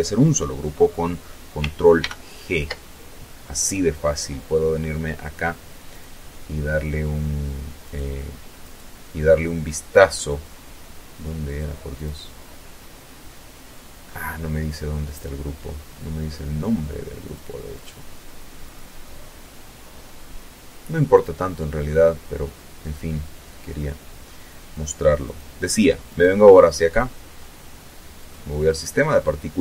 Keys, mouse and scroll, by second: 0.4 ctrl+g, 4.3 click, 6.2 right click, 7.0 right click, 8.1 scroll down 2, 8.5-10.0 scroll up 2, 10.3 click, 11.6-12.3 scroll down 1, 12.4-13.4 scroll up 2, 15.6 click, 16.1 click, 17.0 click, 19.5 click, 23.6 click, 24.5 right click, 26.6 click.